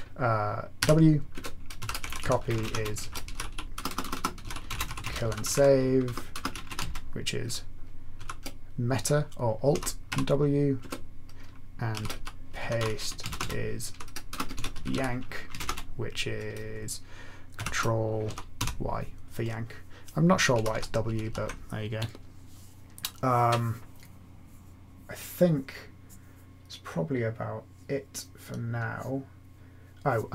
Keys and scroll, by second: 0.7-8.1 typing, 1.3 Return, 9.7-10.0 typing, 10.7 Return, 11.6-16.1 typing, 17.2-21.7 typing.